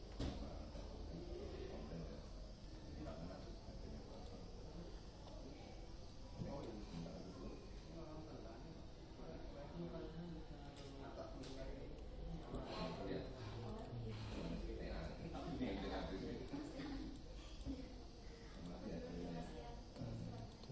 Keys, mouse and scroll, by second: 2.3 g, 6.2 click, 10.8-16.8 drag, 16.9 click, 20.5 click.